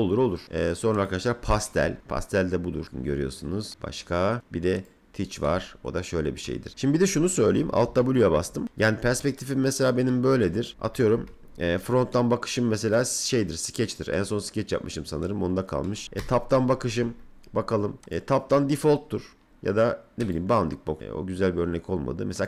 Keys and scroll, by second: 7.8 alt+w, 10.7 F3, 11.2 f, 16.0 t, 16.9 F3.